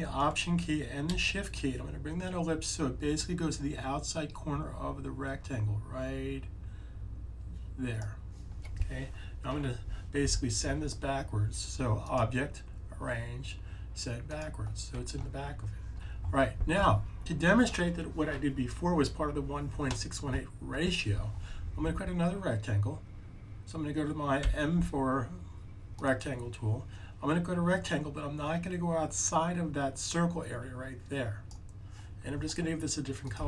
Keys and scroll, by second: 24.3 m.